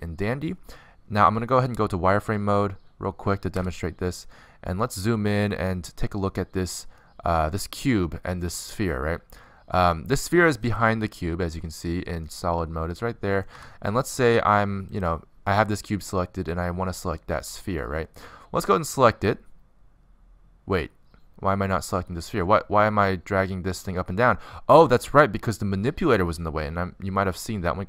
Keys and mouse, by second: 4.1 z, 5.6-9.4 middle drag, 9.6-11.4 middle drag, 11.4-13.2 drag, 13.2 middle click, 13.6 z, 14.3 z, 16.8 click, 17.6 click, 18.4 click, 20.5-22.3 drag.